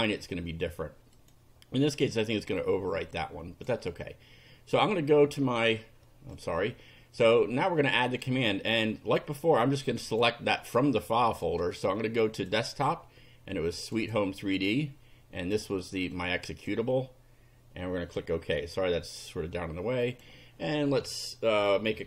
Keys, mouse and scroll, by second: 1.2 click, 3.1 click, 6.4 click, 7.8 click, 10.0 click, 12.3 click, 13.8 click, 15.4 click, 16.1 click, 18.0 click, 20.1 click.